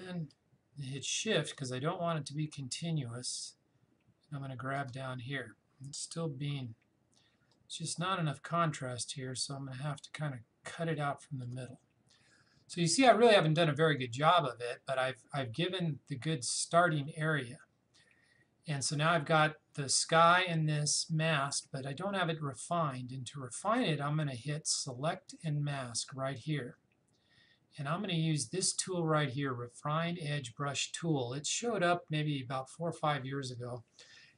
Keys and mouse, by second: 1.9-6.9 shift+drag, 7.9-13.5 alt+drag, 25.2-28.1 drag.